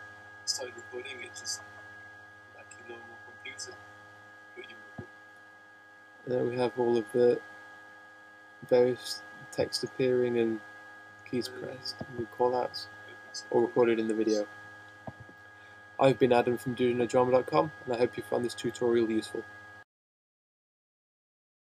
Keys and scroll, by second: 7.7 shift+h, 7.9 Return, 8.9 Return, 9.9 Return.